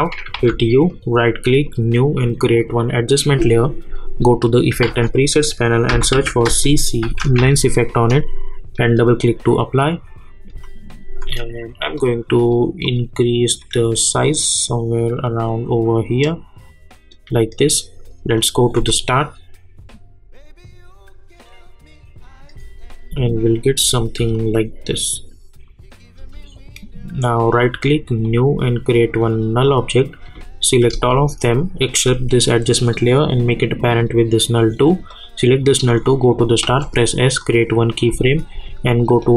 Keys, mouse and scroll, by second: 0.2 click, 0.3 u, 0.9 right click, 1.6 click, 4.8 ctrl+a, 5.9-7.9 typing, 8.7 click, 10.5 space, 11.9-18.7 drag, 18.7 space, 22.6 space, 26.2 space, 26.5 click, 27.4 right click, 28.2 click, 31.8 shift+click, 33.8-36.6 drag, 36.6 s, 37.4 click, 38.1 space, 39.2 click.